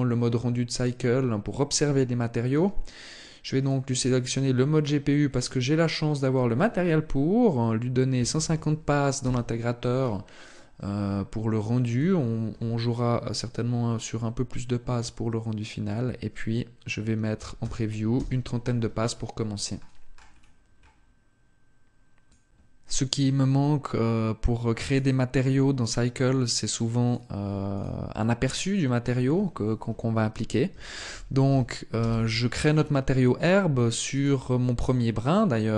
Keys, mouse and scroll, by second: 24.5 right click, 26.7 click, 27.5 click, 28.7 click, 33.8 right click, 34.5 right click.